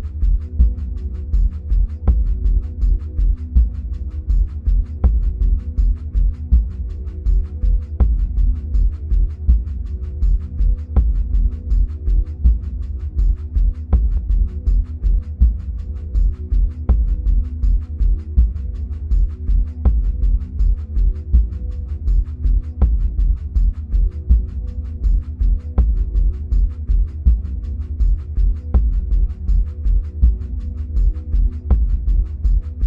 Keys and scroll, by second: 1.3 Delete.